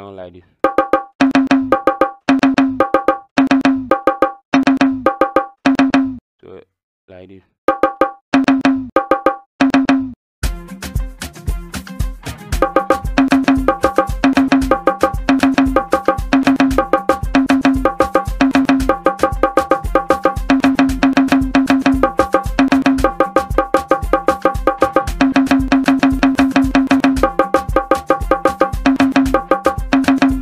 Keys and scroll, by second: 0.6 KP_4, 1.4 KP_5, 1.7 KP_4, 2.8-5.0 typing, 7.6-9.8 typing, 13.2-19.0 typing, 20.4-23.0 typing, 24.2 KP_4, 25.4 KP_5, 26.8 KP_5, 28.4-30.4 typing.